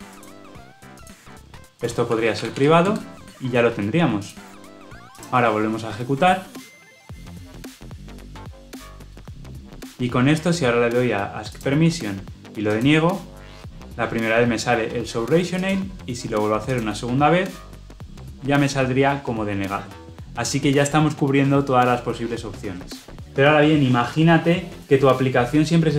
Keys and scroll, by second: 2.7 Return, 4.2 shift+F10, 5.1 shift+F10.